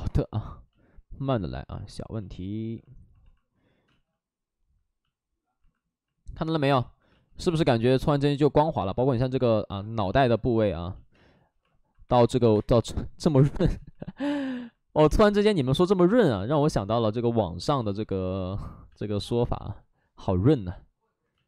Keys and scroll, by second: 3.8 space, 7.0 space, 11.1 space, 12.0 1, 12.4 space, 12.4 space, 13.3 ctrl+z, 13.5 space, 19.2 space.